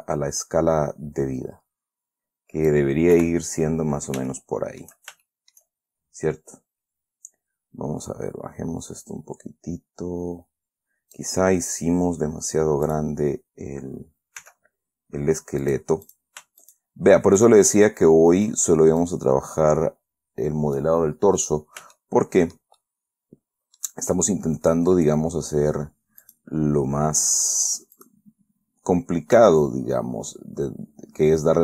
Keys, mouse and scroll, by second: 1.3 s, 3.5 KP_1, 4.6 shift+scroll down 2, 4.6 shift+click, 5.6 shift+middle click, 5.6 shift+scroll down 2, 6.2-6.6 shift+scroll up 3, 8.4-11.7 drag, 12.4 scroll down 1, 13.2 click, 14.7 s, 16.0 click, 16.4 click, 17.0 shift+right click, 17.1 shift+click, 17.7 shift+click, 19.4-21.3 drag, 21.7-22.3 scroll up 2, 22.3 shift+middle click, 23.4 shift+middle click, 26.6 right click, 28.3 right click, 29.7 s.